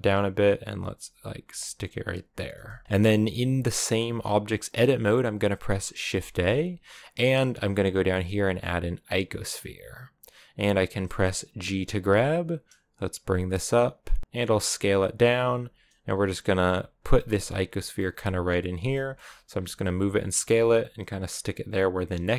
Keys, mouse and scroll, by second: 0.8 r, 1.3 g, 2.5 s, 2.8-3.5 scroll up 2, 3.5-9.0 shift+middle drag, 11.9 g, 14.3 s, 15.3 g, 16.4 s, 16.9 g, 17.4 s, 17.9 g, 18.7 shift+middle click, 19.2 s, 19.7 g, 20.5 g.